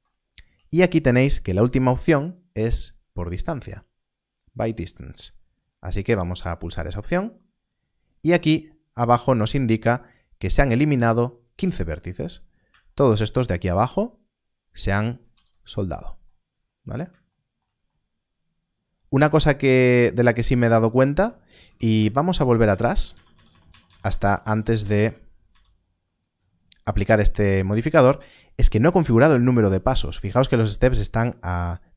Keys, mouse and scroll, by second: 6.4 alt+m, 7.0 click, 12.1 click, 12.4 scroll up 1, 15.2 alt+a, 16.3-16.7 scroll down 1, 16.7 a, 21.5 Tab, 22.2 ctrl+z, 22.6 ctrl+z, 22.8 ctrl+z, 23.0 ctrl+z, 23.2 ctrl+z, 23.4 ctrl+z, 23.6 ctrl+z, 23.8 ctrl+z, 23.9 ctrl+z, 24.1 ctrl+z, 24.5 ctrl+z, 24.7 ctrl+z, 24.9 ctrl+z.